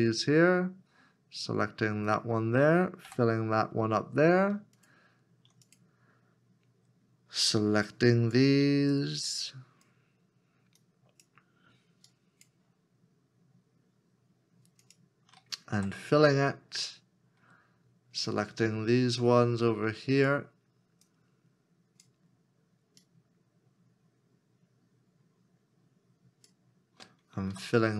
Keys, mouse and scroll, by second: 2.1 shift+click, 4.2 f, 8.9 alt+click, 9.0 shift+click, 10.8 shift+click, 12.1 shift+click, 14.9 shift+click, 15.7 f, 21.1 shift+click, 25.6 shift+click.